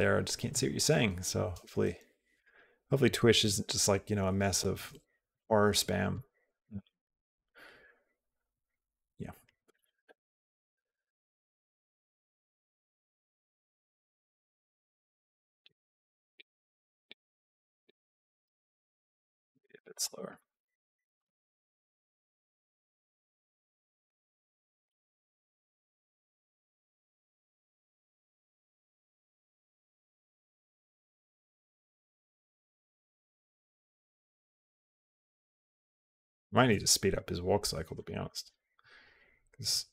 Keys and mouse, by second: 1.4 space, 2.2 click, 6.0 space, 13.4-17.9 drag, 18.3 space, 19.0 click, 19.7 click, 19.8 g, 20.9 click, 21.1 space, 26.6 g, 28.6 g, 30.6 g, 34.5-35.8 drag.